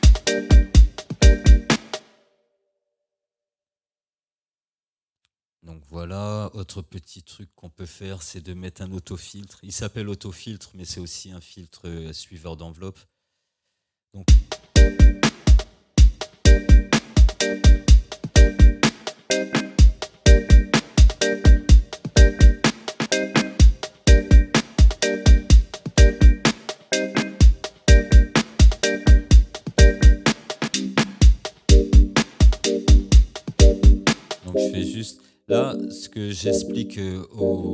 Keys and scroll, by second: 2.0 space, 14.3 space, 15.6 space.